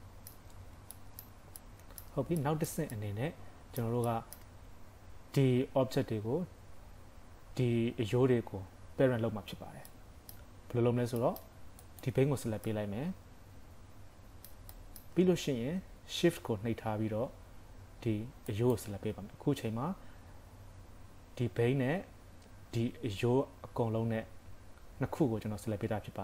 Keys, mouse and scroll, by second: 0.5 scroll up 4, 1.0 shift+middle click, 1.6 middle click, 2.4 shift+middle click, 3.0 middle click, 4.1 shift+middle click, 9.9 middle click, 11.2 shift+middle click, 11.9 click, 12.3 scroll down 2, 12.7 middle click, 14.7 shift+middle click, 15.3 scroll up 1, 18.5 shift+click.